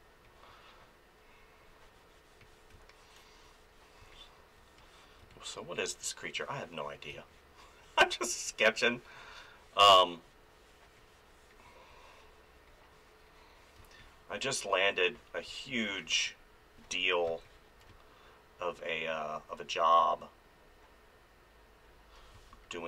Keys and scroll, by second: 2.7 space, 7.1 space, 13.8 space, 15.4 space, 17.3 space, 22.3 space.